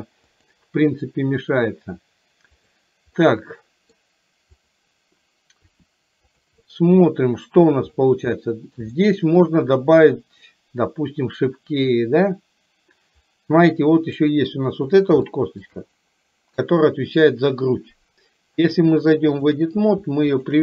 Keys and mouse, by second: 0.4-2.8 drag, 3.4-4.0 middle drag, 4.7 click, 5.8 r, 6.7-7.8 middle drag, 8.5-8.9 middle drag, 9.0-9.5 shift+middle drag, 14.4 click, 15.4 shift+middle drag, 18.9-19.7 drag, 20.5 shift+click.